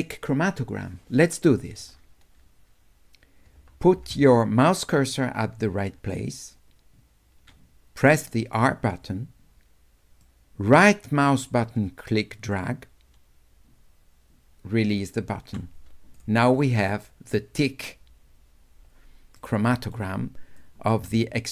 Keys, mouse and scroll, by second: 8.6 w, 10.2-11.4 drag, 11.4-15.0 right drag, 19.4 right click, 20.6-21.5 drag.